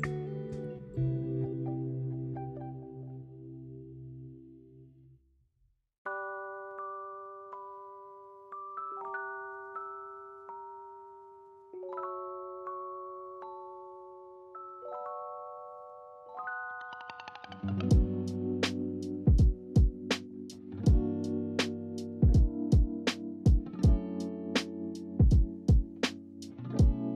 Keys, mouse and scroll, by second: 0.0-1.1 scroll up 1, 1.3-4.3 shift+middle drag, 4.3 s, 6.4 s, 6.4 s, 6.8 shift+middle click, 7.4-8.2 scroll up 2, 8.2 s, 16.7-17.3 scroll up 2, 16.8 middle click, 17.3-18.2 shift+middle drag, 18.2 scroll up 2, 18.6 s, 23.2 s, 24.5 s.